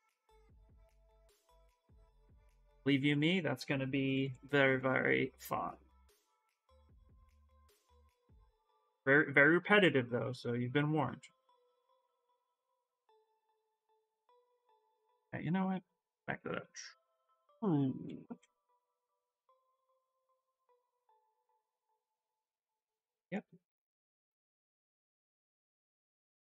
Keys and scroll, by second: 3.9 x, 14.3 b, 15.5 ctrl+z, 19.6-20.8 typing.